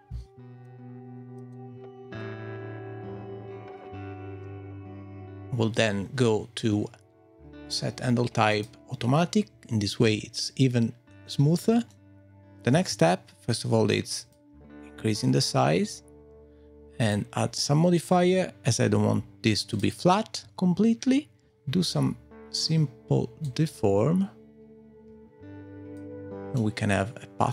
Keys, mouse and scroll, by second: 0.2 scroll down 2, 0.6 click, 1.5 click, 2.5-3.2 scroll down 11, 4.5 super+z, 5.1 click, 10.0 Tab, 11.9 middle click, 12.3-12.7 scroll down 5, 12.7 s, 14.6-15.1 scroll down 2, 15.1-15.8 scroll up 1, 15.8-16.3 scroll down 1, 17.0 click, 17.5 click, 18.7 click, 21.9 middle click, 23.4 click, 26.5 middle click.